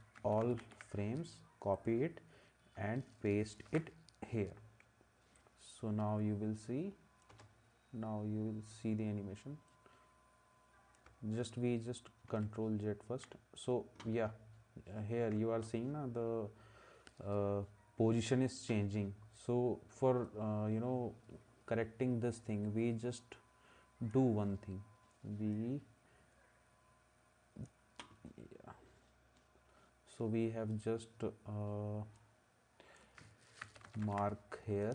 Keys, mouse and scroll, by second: 0.2 ctrl+c, 3.7 ctrl+v, 7.3 space, 12.3 ctrl+z, 33.6 ctrl+c.